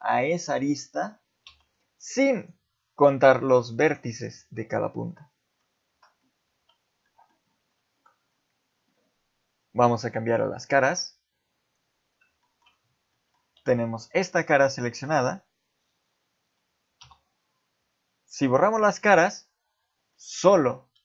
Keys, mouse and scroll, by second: 0.2 click, 1.5 x, 6.5 z, 7.0 middle click, 7.6 ctrl+z, 10.2 click, 10.7 middle click, 11.6 click, 12.4 shift+middle click, 13.1 middle click, 13.4 z, 13.8 middle click, 14.7 middle click, 17.0 x, 20.1 middle click, 20.9 z.